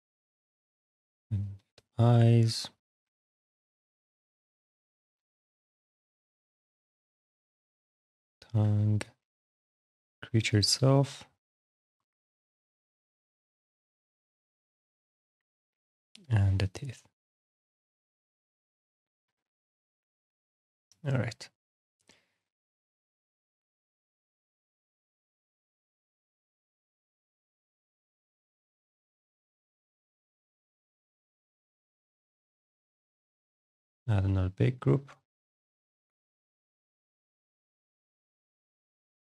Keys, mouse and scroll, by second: 0.6 click, 3.0 ctrl+click, 4.4 click, 8.2 click, 8.6 ctrl+click, 15.5 click, 18.7-19.1 scroll, 19.9 alt+middle click, 20.4-22.1 scroll, 23.0 click, 23.9 click, 25.6 click, 27.1 click, 29.8 click, 33.6 click, 37.6 click, 38.4 click, 39.0 click.